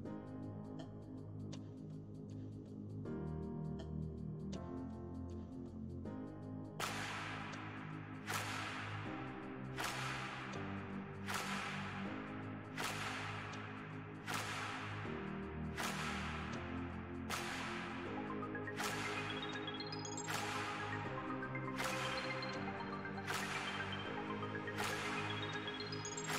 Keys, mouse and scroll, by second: 0.5-3.5 drag, 4.9 middle click, 5.3 click, 6.1 middle click, 6.5-8.0 drag, 8.0 middle click, 8.5 f, 9.2 click, 10.0 middle click, 10.7 space, 11.0 click, 11.6 middle click, 11.9-13.2 drag, 13.2 middle click, 13.6-15.6 drag, 15.6 space, 16.2 f, 17.0-19.3 drag, 19.3 middle click, 19.8-21.0 drag, 21.0 middle click, 21.5 click, 22.0 middle click, 22.4-24.0 drag, 24.0-25.8 middle drag, 25.8 shift+c.